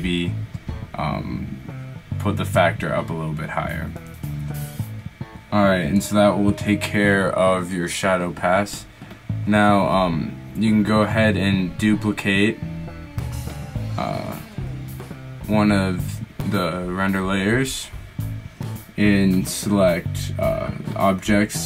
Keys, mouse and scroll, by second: 10.3-12.0 middle drag, 15.5 shift+d, 15.9 right click, 17.4-21.6 right drag.